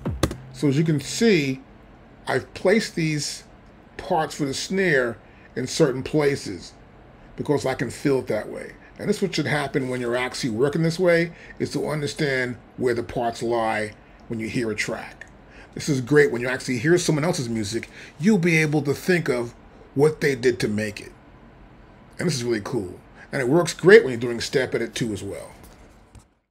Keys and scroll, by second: 0.2 space.